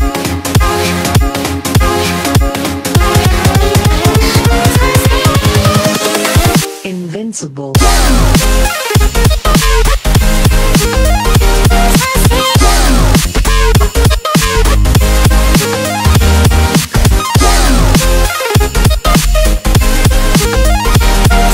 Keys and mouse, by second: 0.0-1.9 typing, 2.1 Return, 4.1-6.5 drag, 6.7-8.0 typing, 10.7-19.1 typing, 19.4 Return, 20.3-21.5 typing.